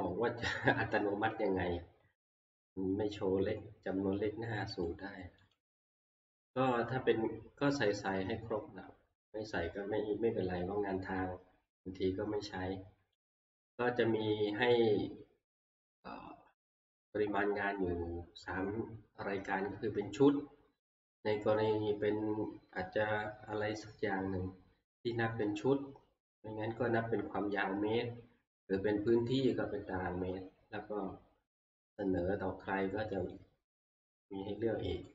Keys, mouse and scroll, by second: 1.3 Right, 1.6 Right, 2.0 Right, 4.9 click, 5.5 click, 13.3 click, 16.8 click, 21.1 Down, 22.8 Down, 25.4 Right, 25.4 Down, 28.0 Right, 30.1 Right, 33.3 click.